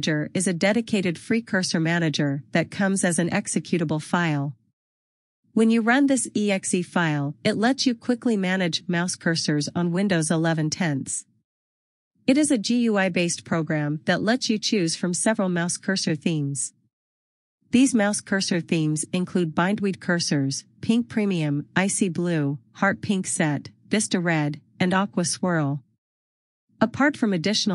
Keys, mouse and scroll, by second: 0.1 click.